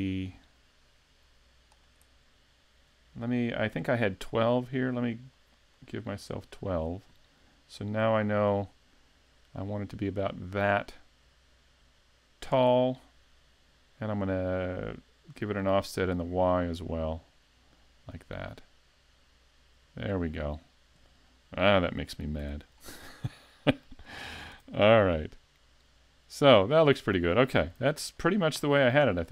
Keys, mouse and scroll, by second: 4.1 click, 4.4 click, 4.6 click, 4.8 click, 4.9 click, 5.1 click, 5.3 click, 5.6 click, 5.7 click, 6.3 click, 8.2 click, 15.4 click, 22.4 z, 22.8 middle click, 24.2 shift+middle click, 24.6 a, 24.9 middle click, 27.8 s, 28.7 shift+middle click.